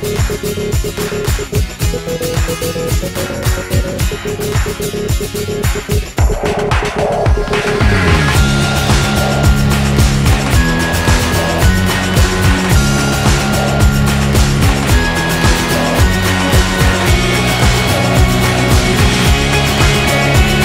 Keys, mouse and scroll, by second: 0.0-0.9 typing, 4.8 a, 5.1 a, 5.7 w, 9.1 Tab, 12.0-16.4 drag, 16.4-17.8 right drag.